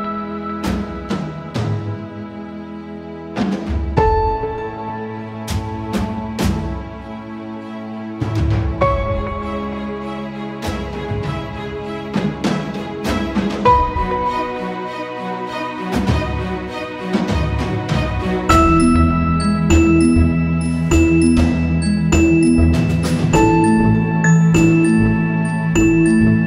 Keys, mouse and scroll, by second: 2.5 click, 4.1-7.0 drag, 11.5 click, 13.4 right click, 13.9 click, 17.2 click, 17.5 ctrl+=, 17.5-18.8 typing, 18.4 click, 20.7 click, 25.9-26.4 drag.